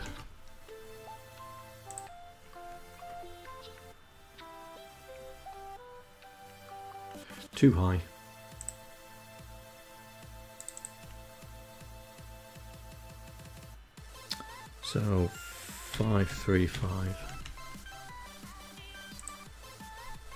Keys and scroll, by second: 15.2-16.8 typing, 16.9 Up.